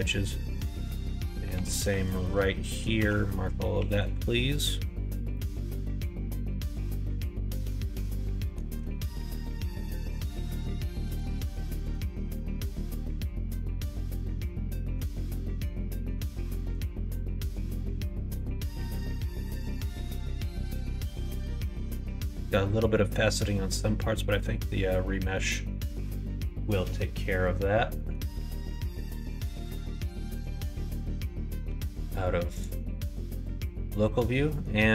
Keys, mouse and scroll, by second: 1.5 2, 1.9 alt+click, 2.5 middle click, 2.9 q, 3.7 q, 5.2-8.4 middle drag, 11.1 click, 11.7 click, 12.2 shift+middle click, 13.5-14.9 middle drag, 16.6 click, 17.5 click, 18.1 middle click, 18.9 Tab, 19.4 middle click, 20.2 middle click, 20.6 middle click, 21.0 middle click, 21.6 middle click, 22.9 middle click, 23.4 middle click, 24.3 middle click, 25.1 middle click, 27.9 middle click, 28.3 middle click, 28.6 middle click, 28.9 middle click, 29.2 middle click, 29.5 shift+middle click, 29.9 middle click, 32.5 click, 32.9 middle click, 33.5 middle click, 34.4 middle click.